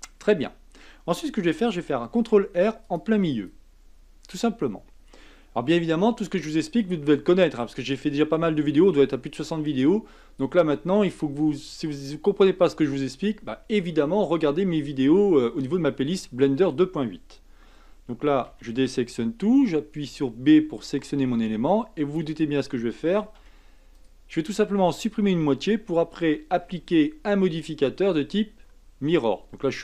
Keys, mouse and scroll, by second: 2.2 ctrl+r, 18.4 a, 19.5 b, 23.3 x, 26.6 Tab.